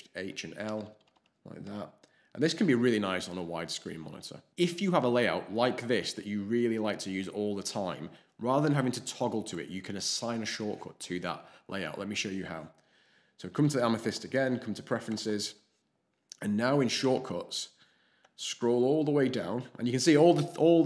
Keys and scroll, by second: 0.1 alt+shift+h, 0.6 alt+shift+h, 0.8 alt+shift+l, 1.6 alt+shift+l.